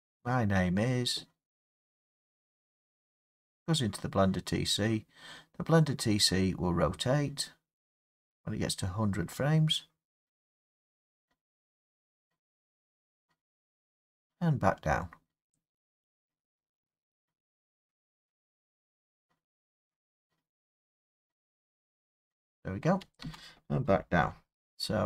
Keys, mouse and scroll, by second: 23.2 space, 24.3-25.0 Left.